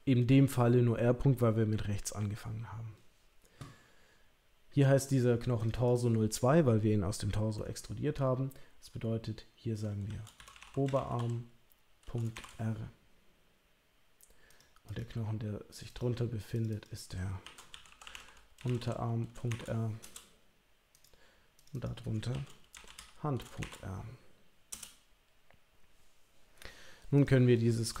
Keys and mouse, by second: 5.7-14.6 drag, 14.9 click, 15.7 click, 15.9 click, 16.5 click, 16.7-20.4 drag, 21.7-25.2 drag, 27.1 click.